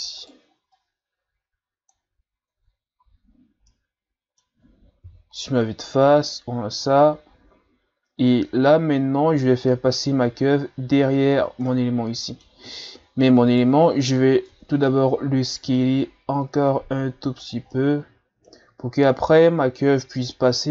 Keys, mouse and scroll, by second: 0.2 right click, 0.7-2.6 drag, 2.6 Tab, 3.0 a, 3.3-3.7 scroll down 3, 3.7-5.0 middle drag, 5.0 KP_1, 6.1-7.3 scroll up 3, 11.7-13.0 middle drag, 13.0-13.5 scroll up 1, 13.5 right click, 14.5 Tab, 14.9 a, 15.2 a, 15.7 s, 17.7-20.7 middle drag.